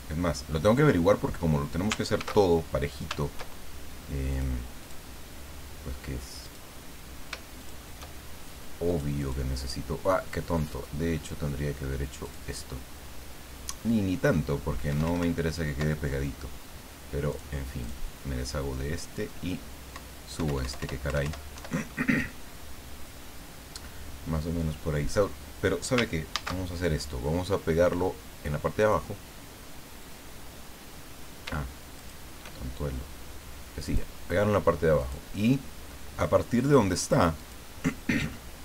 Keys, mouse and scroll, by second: 2.3 ctrl+shift+a, 4.3 click, 4.8 click, 6.4 click, 7.6 shift+click, 8.8 click, 12.2 click, 14.9 Up, 17.3 click, 17.8 click, 19.0 click, 19.9 Up, 21.5 Down, 26.3 ctrl+shift+a, 28.8 click, 31.9 shift+click, 33.8 click, 35.0 click, 36.6 click, 37.4 click.